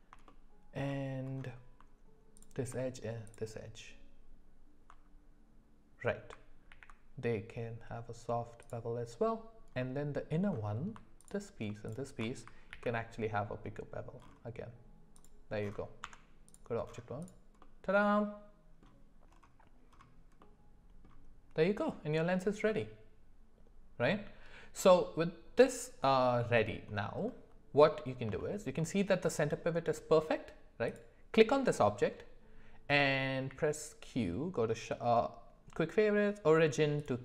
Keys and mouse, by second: 0.3 shift+middle click, 6.7 ctrl+b, 9.8 middle click, 11.8 alt+shift+click, 12.7 ctrl+b, 16.0 Tab, 17.6-18.8 middle drag, 22.7-24.8 middle drag, 26.1 middle click, 27.9 middle click, 28.4 shift+middle drag, 28.8 middle drag, 30.8 click, 33.5 q.